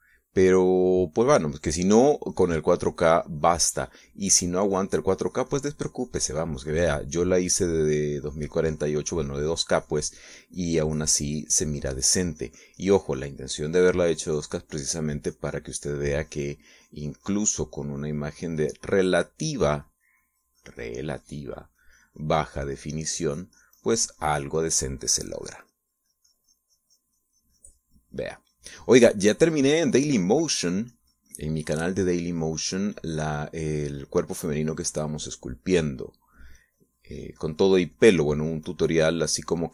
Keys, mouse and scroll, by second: 0.0 shift+middle click, 2.7-13.1 drag, 13.2-14.4 drag, 14.4 middle click, 15.0-30.6 drag, 30.7 middle click, 31.2-39.7 drag.